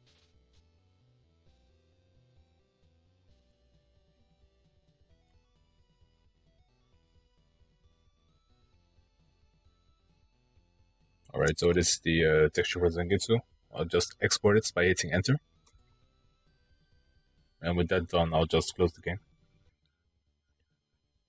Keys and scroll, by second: 14.6 Return.